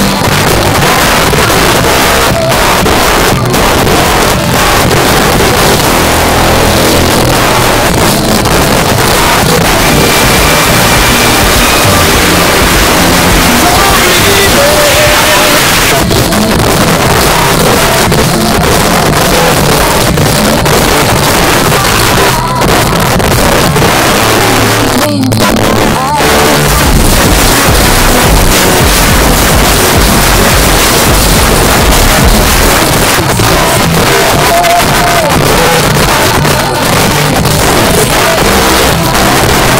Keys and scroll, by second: 15.6 Page_Down, 32.7 Page_Down.